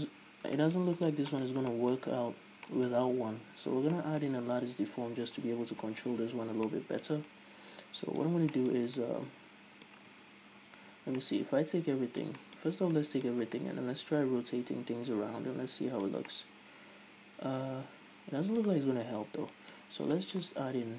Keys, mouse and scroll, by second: 1.7 right click, 2.1-10.5 middle drag, 2.9 scroll down 2, 10.5 Tab, 10.8 scroll up 1, 10.9 a, 11.6 middle click, 13.1 scroll up 1, 13.3 middle click, 19.7 scroll down 1, 19.9 middle click, 20.2 scroll up 1, 20.5 middle click.